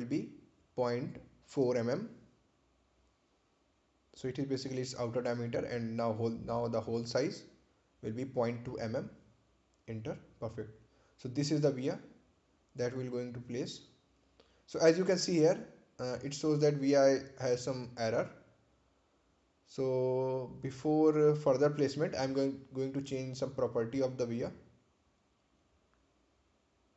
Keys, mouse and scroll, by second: 1.5-2.8 typing, 3.6 Return, 4.8 click, 9.5-10.5 typing, 11.3 Return, 12.1 click, 15.4 ctrl+c, 16.9 click, 20.1-20.7 scroll down 1, 20.7-22.8 scroll up 1, 25.4 click.